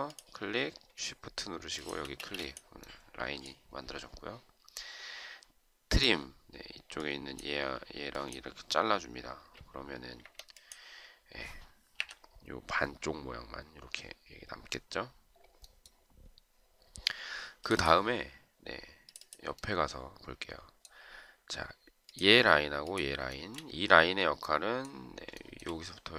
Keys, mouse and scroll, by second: 1.6 shift+click, 2.2 space, 10.3 Escape, 12.0 Delete, 23.3 shift+right click, 25.4 shift+right click.